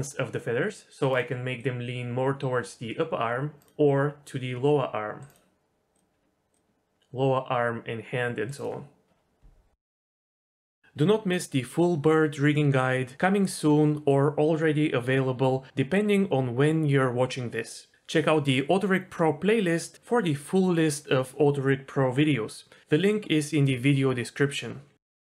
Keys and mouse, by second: 1.5-3.6 drag, 4.2 click, 7.0-9.4 drag, 10.2-12.2 typing, 14.3 g, 14.5 g, 15.2 g, 16.2-17.3 middle drag, 19.7 g, 20.7 g, 21.1 middle click, 21.8 s, 23.0 middle click, 23.4-24.5 drag.